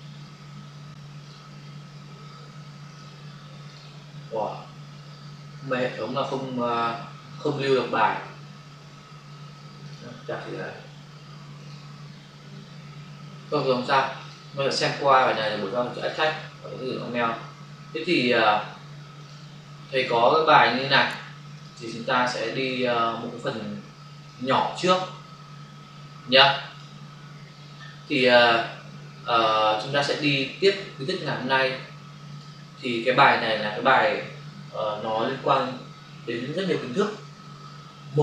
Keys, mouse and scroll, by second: 1.3 click, 2.9 click, 6.2-6.6 scroll down 1, 8.8 scroll up 1, 9.8 click, 10.0 click, 11.6 click, 12.9 click, 13.5 click, 13.6 click, 15.1 click, 15.2 click, 15.3 click, 15.5 click, 15.9 click, 16.3 click, 19.2 click, 19.3 click, 20.6 click, 20.9 click, 21.6 click, 21.6 double click, 21.8 click, 24.2 click, 29.3 click, 29.5 click, 32.3 click, 32.4 click.